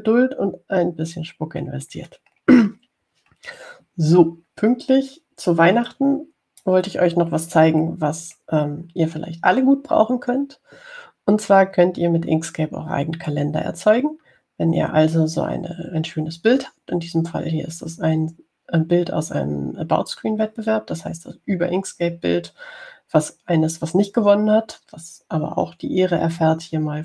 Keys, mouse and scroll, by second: 1.1 scroll up 2, 2.8-3.4 scroll down 2, 4.0-4.6 scroll down 2, 4.6 scroll down 1, 5.5 scroll up 2, 7.0-8.3 drag, 8.3-9.3 scroll up 2, 9.4-9.9 scroll up 2.